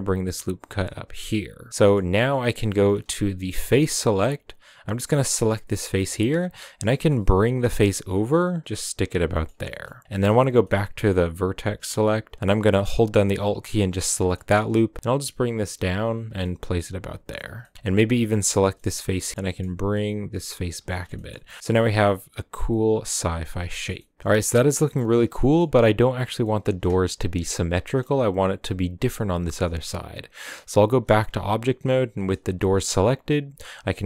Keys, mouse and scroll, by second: 1.3 middle click, 1.7-3.3 scroll up 4, 1.8 shift+middle drag, 3.3 3, 3.8 shift+middle click, 4.0-5.2 scroll up 2, 5.2 right click, 5.7 scroll down 1, 5.9 middle click, 6.4 scroll down 1, 6.6 middle click, 6.8 g, 9.2 scroll down 1, 9.3 middle click, 10.1-10.6 scroll up 1, 10.6-13.3 middle drag, 13.3 alt+right click, 13.9-14.5 middle drag, 14.5 g, 16.3 scroll down 1, 16.4 middle click, 17.4 scroll down 3, 17.6 shift+middle click, 17.7 3, 18.5 right click, 18.7 middle click, 19.4 g, 20.7 scroll down 4, 20.9-24.6 shift+middle drag, 24.6 scroll up 1, 24.7-30.1 middle drag, 30.1 Tab, 31.2 g.